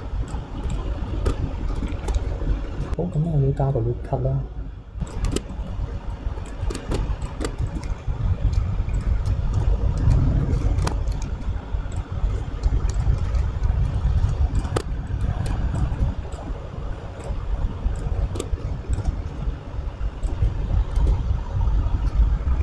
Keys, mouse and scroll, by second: 0.7 click, 1.3 Tab, 1.3-1.9 scroll up 3, 1.9 shift+middle click, 2.7 ctrl+r, 5.3 Tab, 5.5 middle click, 6.5 click, 6.7 Tab, 6.9 Tab, 7.2 click, 7.4 Tab, 7.7-8.9 shift+middle drag, 8.9 alt+click, 9.5 w, 9.6 a, 10.9 alt+z, 11.9-13.0 drag, 14.2 e, 14.8 Tab, 14.9-15.5 middle drag, 14.9 scroll down 1, 15.5 KP_3, 15.8 click, 16.3-17.9 drag, 18.0 click, 18.4 Tab, 18.9 alt+click, 20.2-21.7 drag.